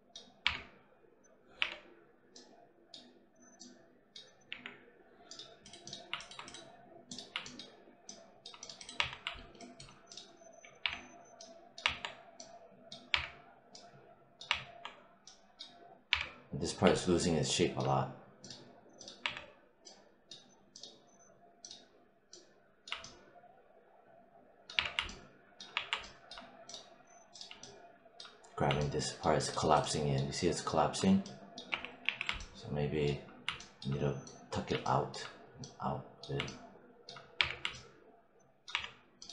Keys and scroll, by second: 0.3 3, 1.5 4, 4.4 5, 8.8 1, 10.7 3, 13.0 3, 14.3 1, 16.0 3, 19.1 1, 24.6 3, 25.6 1, 31.9 z, 37.2 3, 38.6 1.